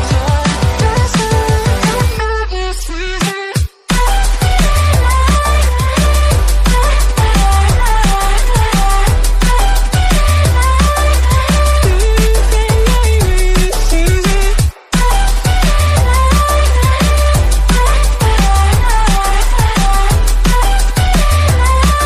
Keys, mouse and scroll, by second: 0.5 click, 1.1 KP_Divide, 1.5-2.3 scroll down 1, 2.3-4.2 drag, 4.3 KP_7, 4.5 KP_9, 5.0 scroll up 3, 6.1 shift+a, 8.4 drag, 9.2-12.2 drag, 12.2-13.0 scroll up 2, 13.0-14.4 drag, 14.4-15.8 scroll up 1, 16.2 click, 16.4 scroll down 2, 16.9 scroll up 1, 17.4 KP_Divide, 18.0 click, 18.6 Tab, 19.2 e, 20.5 click, 21.0 Tab, 21.2-22.0 right drag.